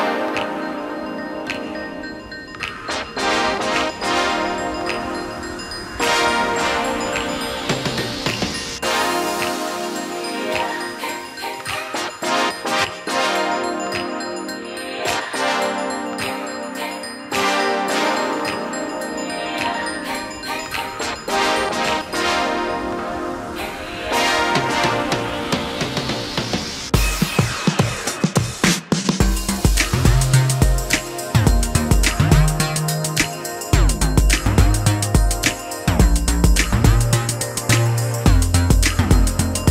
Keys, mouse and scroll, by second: 0.2 typing, 5.5 shift+click, 5.9 space, 10.8 shift+middle click, 10.9 shift+double middle click, 12.0 shift+x, 18.8 space, 20.2 ctrl+f, 22.6 shift+middle click, 27.7 shift+middle click, 36.2 alt+t.